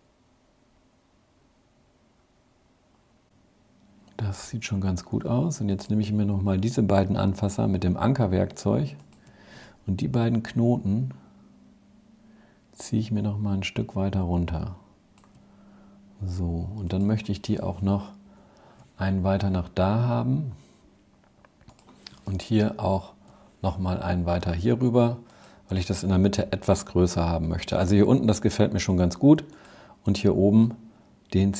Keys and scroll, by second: 17.4 shift+Right, 22.1 shift+Left.